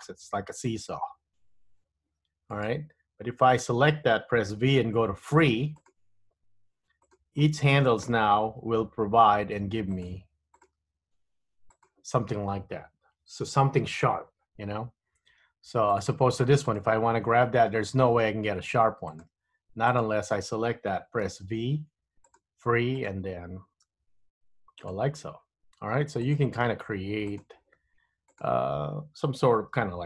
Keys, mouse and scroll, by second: 3.6 click, 4.6 v, 7.2 click, 9.5 g, 10.6 click, 10.9 g, 16.1 click, 16.8 click, 17.4 g, 20.0 click, 21.4 v, 23.1 click, 24.0 g, 26.3 click, 26.6 g, 28.4 click.